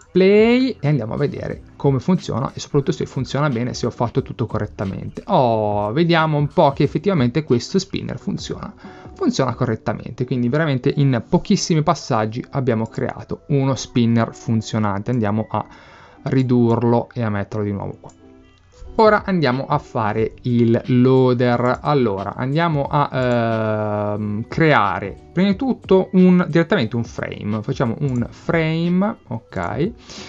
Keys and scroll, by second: 18.3 BackSpace.